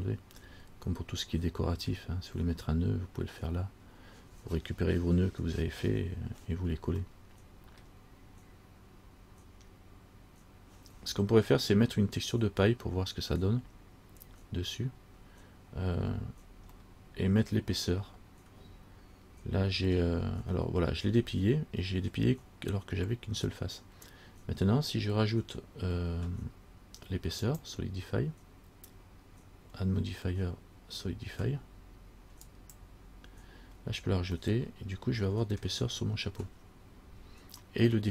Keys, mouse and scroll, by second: 0.6-1.5 scroll down 2, 1.6 middle click, 7.3 middle click, 17.0 middle click, 27.6 click, 34.6 middle click, 36.5 scroll up 3, 37.2-37.7 scroll down 3, 37.9 middle click.